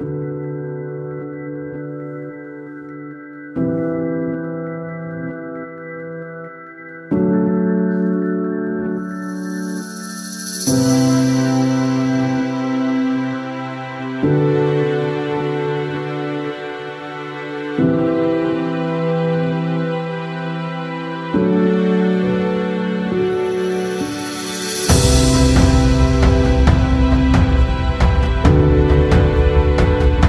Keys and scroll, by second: 2.0 Tab, 3.3 p, 3.5 Tab, 11.5 ctrl+z, 27.5 Tab, 28.2 Tab, 29.2 Tab, 29.4 l.